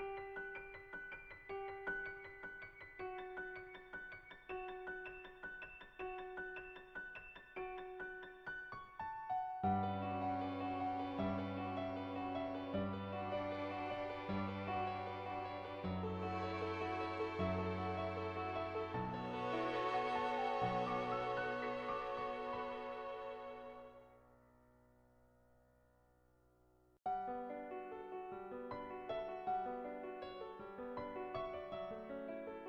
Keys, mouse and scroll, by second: 0.0-0.2 typing, 0.4 click, 2.9 ], 3.1 click, 3.6 ctrl+z, 3.6 [, 3.8 click, 4.1 [, 4.3 click, 5.3 [, 5.5 click, 6.0 ], 6.2 ], 6.4 click, 7.6-8.6 drag, 9.3 click, 10.2 shift+click, 10.8-12.5 shift+drag, 12.8-14.3 drag, 14.6 ctrl+z, 15.4 click, 17.4 click, 21.0 middle click, 23.4 click, 24.5 [, 24.6-25.8 drag, 26.2 [, 26.4 click, 27.1 ctrl+z, 27.2 ], 27.3 ], 27.4 click, 27.9 ctrl+z, 28.0 ], 28.2 click, 28.7 click, 29.6 /, 31.1 shift+click, 31.3 middle click.